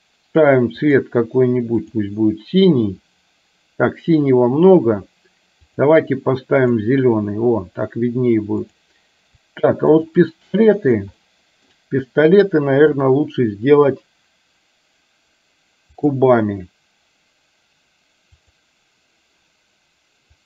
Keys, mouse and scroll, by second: 6.7 click, 8.7 click, 10.0 shift+click, 11.4 middle click, 13.0-16.3 drag, 18.4 click.